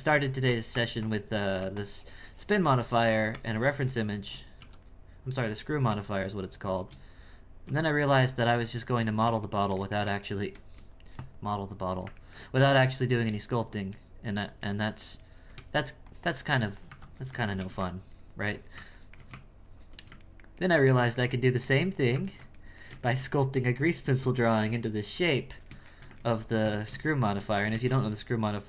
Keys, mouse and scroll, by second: 5.5-7.6 drag, 7.6 Tab, 8.6-13.3 ctrl+middle drag, 13.3 right click, 13.9 right click, 14.6 ctrl+right click, 15.2 ctrl+right click, 17.6 ctrl+x, 19.0 ctrl+middle click, 19.3 Tab, 20.2-26.6 ctrl+middle drag, 26.6 Tab, 27.1 shift+middle click, 27.5 click, 27.7 shift+a.